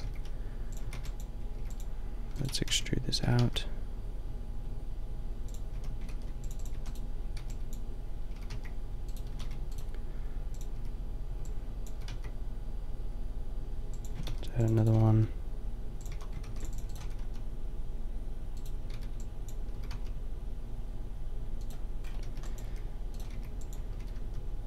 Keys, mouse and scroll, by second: 0.0-3.2 typing, 5.8 a, 6.1 ctrl+r, 6.7 a, 7.4 b, 8.3 s, 9.3 a, 9.5 b, 10.7 b, 11.9 s, 14.1 a, 14.3 ctrl+r, 14.9 s, 16.0 a, 16.4 ctrl+r, 17.0 s, 18.9 b, 19.7 s, 22.0 click, 22.3 b, 22.7 g, 23.3 b, 23.9 s.